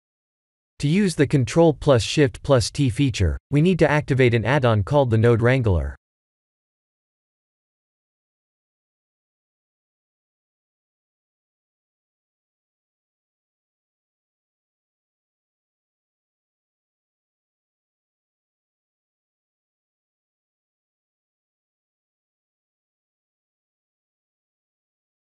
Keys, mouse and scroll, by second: 6.8 scroll down 6, 7.8-8.2 scroll up 3, 8.3 shift+middle click, 8.7 shift+middle click, 9.0-9.5 scroll up 1, 9.5 middle click, 9.5 scroll up 1, 11.2 scroll down 2, 12.5 Tab, 13.5 a, 14.4 Tab, 15.6 click, 16.4 middle click, 17.0 Tab, 18.2 u, 22.5 Tab, 23.1-23.8 scroll up 2, 23.8 click.